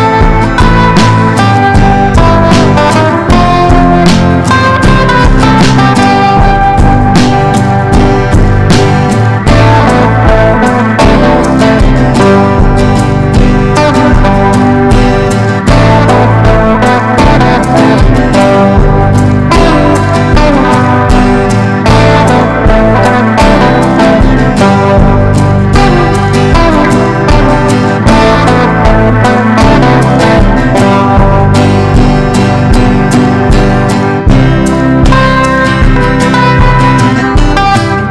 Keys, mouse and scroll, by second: 0.0-18.4 typing, 11.0 Return, 19.2 Return, 20.7-33.3 typing, 26.5 Return, 34.2 Return, 34.7-38.1 typing.